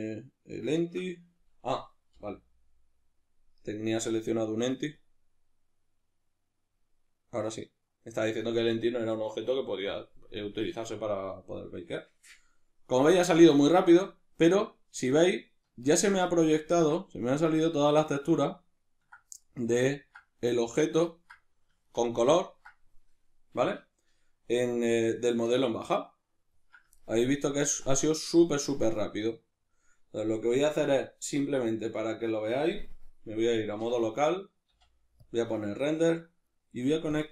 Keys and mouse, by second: 15.1-32.0 ctrl+middle drag, 32.0 right click, 33.8 \, 34.7 z, 37.2-37.3 drag.